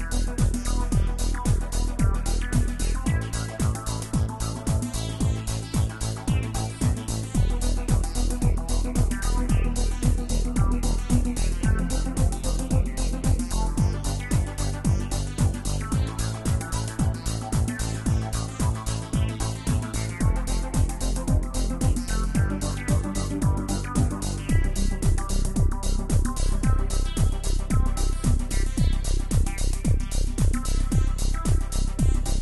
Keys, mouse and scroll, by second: 1.1 scroll down 1, 1.2-1.8 middle drag, 1.8 click, 3.6 click, 6.8 scroll down 4, 9.4-23.3 drag, 30.8-32.0 drag.